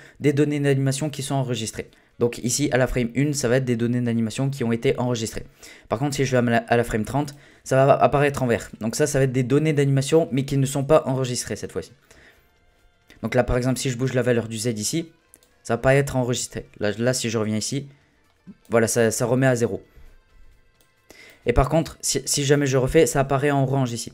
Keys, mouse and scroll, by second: 6.3-9.4 drag, 14.0-17.1 drag, 17.2-20.2 drag, 20.8-24.1 drag.